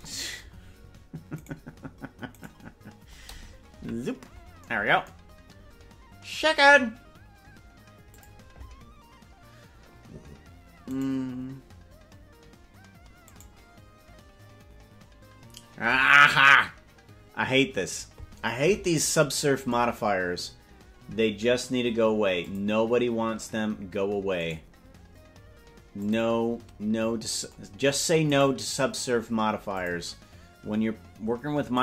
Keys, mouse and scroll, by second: 1.8 right click, 2.8 right click, 4.0 KP_Decimal, 5.6 scroll down 3, 5.8 scroll down 1, 8.2 click, 11.2 right click, 13.6 right click, 22.5 click, 24.6 right click, 26.1 click, 28.6 right click, 29.9 click.